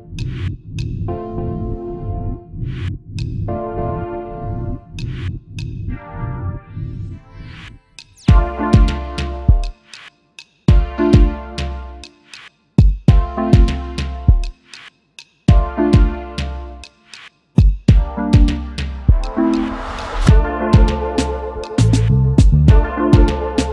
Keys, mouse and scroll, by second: 8.3 double click, 9.1 alt+scroll up 1, 11.9 space, 12.0 alt+scroll up 1, 12.6 alt+scroll down 1, 13.4 space, 18.6 alt+scroll up 1.